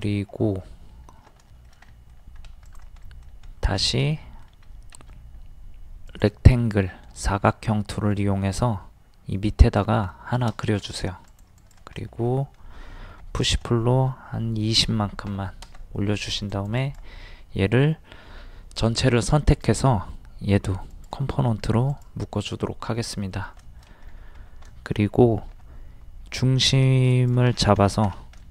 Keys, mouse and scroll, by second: 1.5 shift+middle click, 2.4 scroll up 1, 2.7 click, 3.4 scroll up 1, 4.1 middle click, 4.7 scroll up 1, 6.1 click, 6.7 middle click, 7.4 scroll up 1, 9.6 click, 10.1 middle click, 11.3 click, 12.0 middle click, 13.1 d, 13.4 click, 14.8 KP_2, 16.3 click, 19.5 right click, 20.9 click, 23.6 shift+middle click, 24.1-24.6 scroll up 1, 24.7-27.1 shift+middle drag, 27.1 click, 27.5-27.9 scroll down 1, 28.4 shift+middle click.